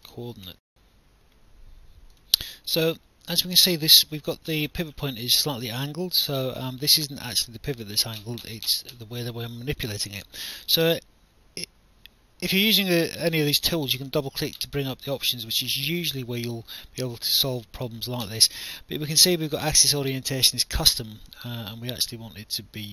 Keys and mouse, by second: 0.5 alt+F9, 4.1 alt+click, 5.3 alt+click, 6.8 alt+middle click, 7.6 alt+click, 9.8 click, 15.2 click, 16.2 alt+middle click, 16.8 alt+click, 20.9 click.